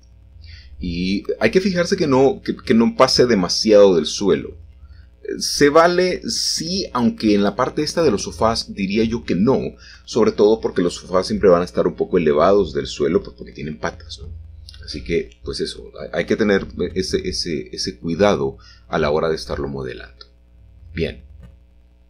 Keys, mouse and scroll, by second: 5.4-6.0 scroll up 1, 6.5 shift+middle click, 8.4-9.8 scroll down 2, 9.8-10.3 scroll down 1, 10.4-12.1 middle drag, 12.3-13.4 middle drag, 13.5-17.7 middle drag, 17.9 middle click, 18.7-19.2 scroll up 1, 19.8-21.2 scroll down 2, 21.2-22.0 scroll down 1.